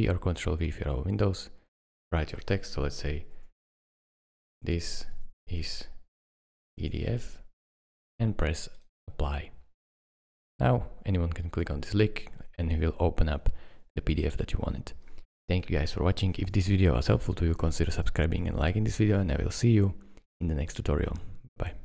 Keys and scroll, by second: 4.1-7.3 typing.